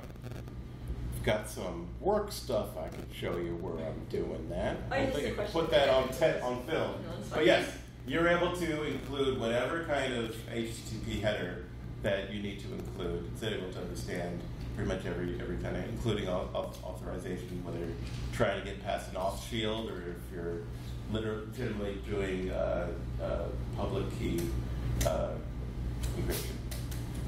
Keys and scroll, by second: 0.9 Down.